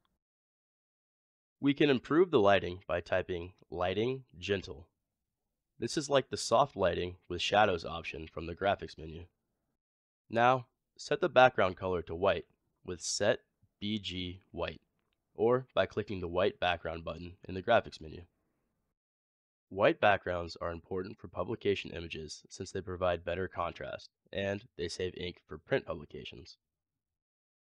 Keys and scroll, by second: 3.1 typing, 11.7-12.5 typing.